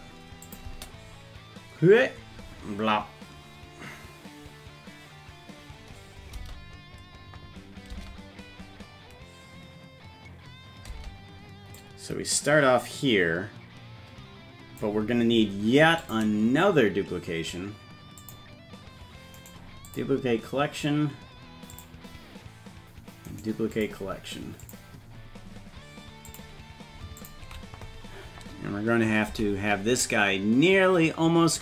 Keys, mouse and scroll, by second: 0.5 click, 0.7 space, 6.4 space, 7.9 space, 11.8-14.9 drag, 11.8 space, 16.1 click, 18.3 click, 19.4 right click, 21.8 click, 23.3 right click, 24.7 click, 25.2-26.3 scroll down 4, 26.3 click, 27.2 ctrl+click, 29.3 g.